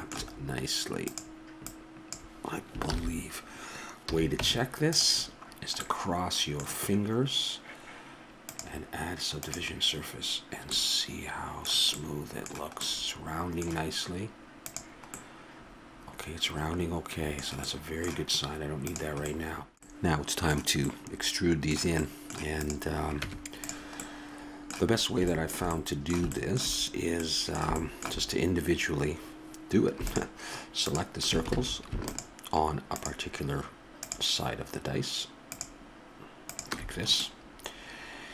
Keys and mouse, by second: 1.0-3.4 drag, 2.8 ctrl+z, 4.0 a, 4.4 Tab, 8.4-10.7 drag, 10.7-12.2 middle drag, 14.6-15.1 drag, 15.1-15.9 middle drag, 15.9-16.7 drag, 18.8-19.9 drag, 20.5-22.9 middle drag, 22.9-24.2 drag, 23.6 Tab, 24.3 click, 30.4 click, 31.8 ctrl+z, 37.2-38.3 drag.